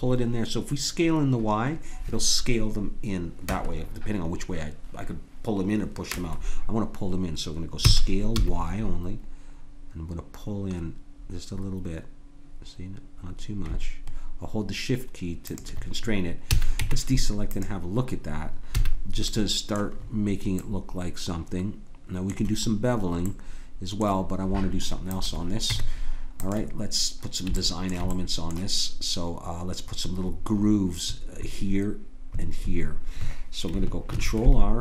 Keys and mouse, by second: 7.8 s, 16.5 a, 16.8 Tab, 18.7 a, 19.3-20.9 middle drag, 25.1-27.0 drag, 25.6 Tab, 27.6-30.8 drag, 34.1 ctrl+r.